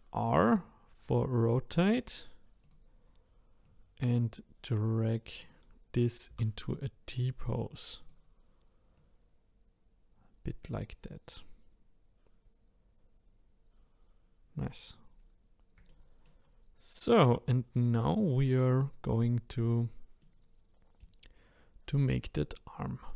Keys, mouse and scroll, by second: 3.6 click, 6.3 r, 8.9 click, 15.0-15.9 scroll up 4, 15.9 shift+middle click, 17.0-19.9 scroll down 1, 20.2-23.1 middle drag.